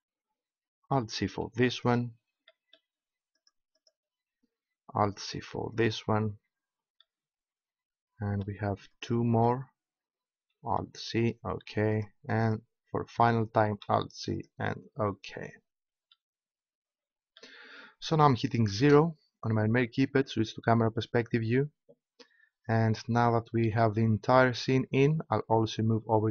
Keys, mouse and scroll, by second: 2.1 alt+c, 3.4 click, 4.3-5.4 right drag, 5.2 alt+c, 10.7 alt+c, 10.7 right click, 11.9-13.1 right drag, 13.7 alt+c, 13.7 right click, 18.7 KP_0.